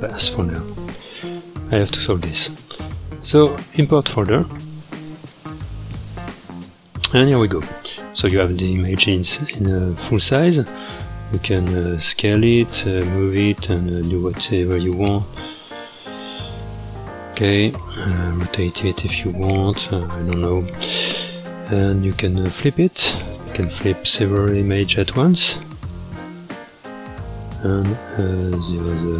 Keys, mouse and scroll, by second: 5.1-7.2 drag, 7.2-8.4 scroll up 16, 8.4-9.2 scroll down 12, 9.4-10.2 scroll up 11, 10.2-11.2 scroll down 11, 11.2-11.5 scroll up 4, 11.8 click, 13.0 s, 14.6-15.8 scroll down 2, 15.8 click, 16.1 g, 16.8 s, 18.8 g, 20.1 alt+r, 22.5-24.1 drag, 25.4-29.1 drag.